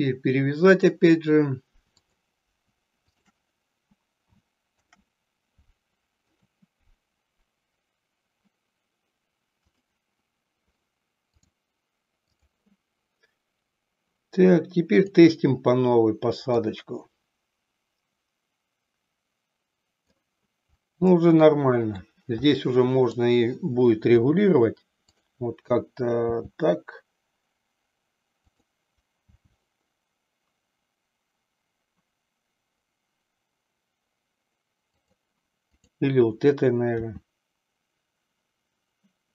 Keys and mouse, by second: 2.0 click, 3.1 shift+click, 4.6 ctrl+p, 9.6 click, 11.3-12.7 drag, 16.7-20.3 drag, 21.3 middle click, 22.5 middle click, 24.1 KP_3, 25.1 click, 26.4 g, 28.6 click, 29.5 g, 35.2 click, 35.8 click, 37.2 r.